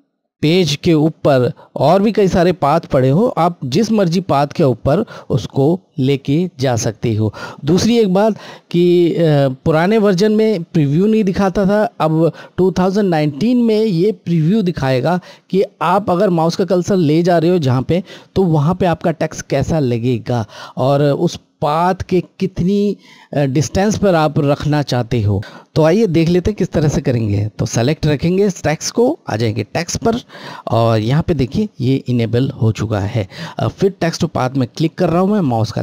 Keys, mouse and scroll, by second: 4.4 scroll, 29.4 click, 34.5 click.